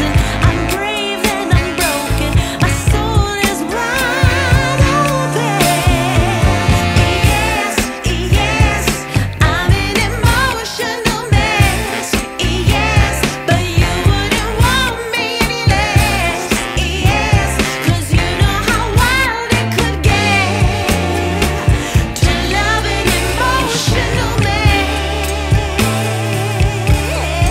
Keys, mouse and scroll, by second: 1.7 e, 18.0 click, 21.9 x, 26.7 Tab.